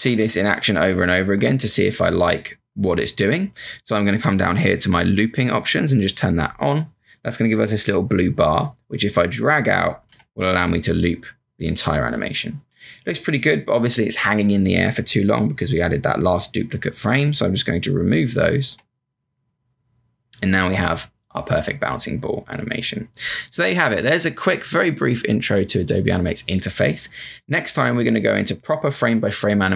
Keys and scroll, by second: 2.5 Return, 10.0 Return, 18.6 Return.